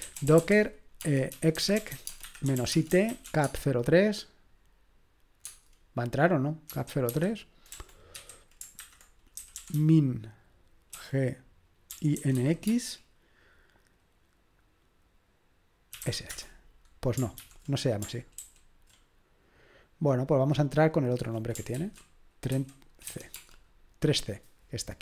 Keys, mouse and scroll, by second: 0.0-3.7 typing, 5.4 Tab, 6.7-12.8 typing, 15.7-16.5 typing, 17.4 ctrl+p, 18.4 ctrl+w, 21.7 ctrl+w, 22.5 3, 23.1 c, 23.3 space.